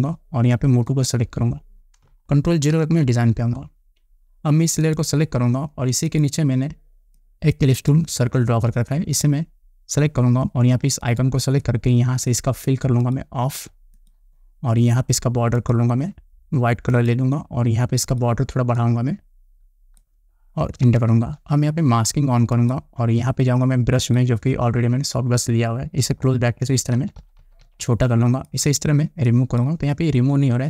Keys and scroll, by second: 3.3 ctrl+0, 21.4 Return, 26.6 [.